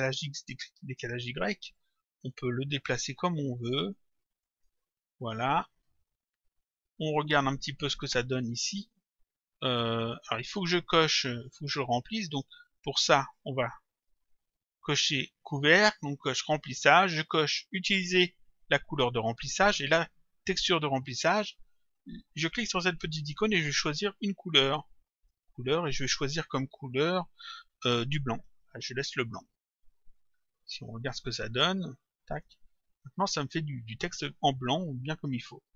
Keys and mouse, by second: 1.2 click, 6.5 click, 8.0 click, 11.5 click, 13.4 click, 17.7 click, 22.5 click, 25.2 click, 30.7 click, 32.3 click.